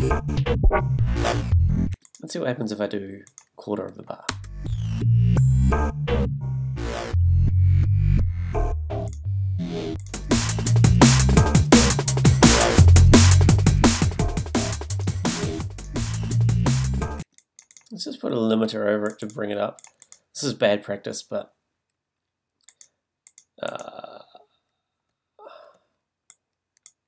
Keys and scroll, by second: 1.9 space, 4.3 space, 17.2 space.